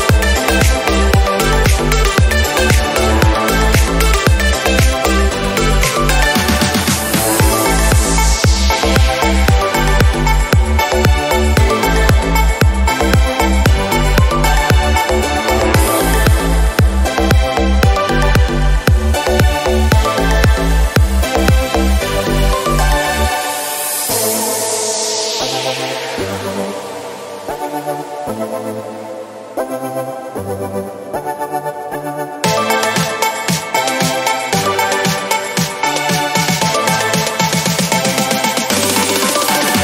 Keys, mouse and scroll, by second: 0.1-1.5 scroll up 1, 1.5-3.1 drag, 3.1 shift+a, 3.9 r, 4.9 click, 5.2 scroll down 3, 5.3-6.1 middle drag, 6.1 click, 6.4-6.9 scroll down 4, 6.9 s, 10.6 click, 13.2 click, 13.7 s, 16.4-18.1 drag, 18.1 r, 19.0 g, 19.4 middle click, 20.4 s, 20.8 middle click, 21.1 click, 21.6 middle click, 21.6 KP_0, 22.3-22.9 scroll up 2, 24.7-26.4 drag, 26.4 KP_7, 26.9 shift+d, 27.4 r, 27.9 g, 29.8 scroll down 3, 29.9-30.7 middle drag, 30.7 click, 30.9-31.2 scroll down 2, 31.2 click, 32.5-33.0 scroll up 3, 35.3 scroll up 3, 35.6 click, 36.0 KP_7, 36.5 shift+d, 37.2 alt+g, 37.3 alt+r, 37.6 middle click, 37.8 click.